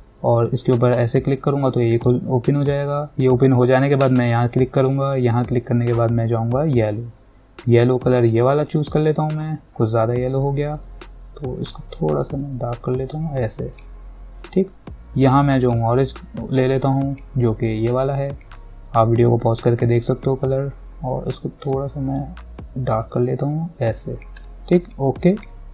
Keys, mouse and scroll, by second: 4.3 click, 8.5 click, 11.0-14.0 drag, 18.2 click, 22.0-24.6 drag.